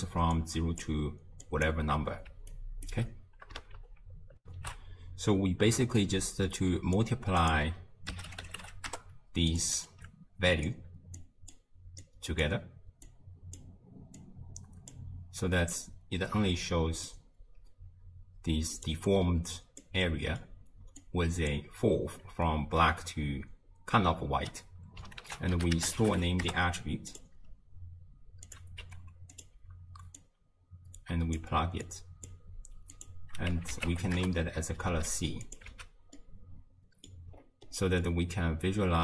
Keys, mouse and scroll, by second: 0.2-3.0 typing, 0.4-0.8 drag, 1.4 click, 2.5 right click, 4.4 ctrl+alt+shift+q, 7.0 click, 9.9 alt+click, 11.2 click, 12.0 click, 13.1 click, 14.2 drag, 16.5-18.8 middle drag, 18.8 click, 19.1 click, 20.0-21.0 middle drag, 21.0 click, 25.2 ctrl+a, 28.5 click, 28.8 g, 30.2 click, 31.9 click, 32.9-35.6 drag, 35.7 x, 36.2-37.4 middle drag, 37.4-38.0 scroll down 9, 38.0-39.0 middle drag.